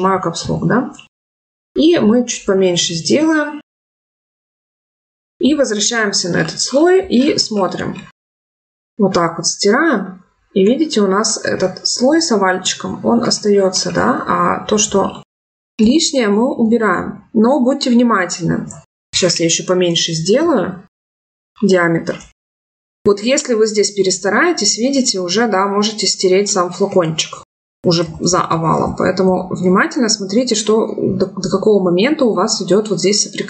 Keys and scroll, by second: 19.6 [, 26.8 ctrl+z.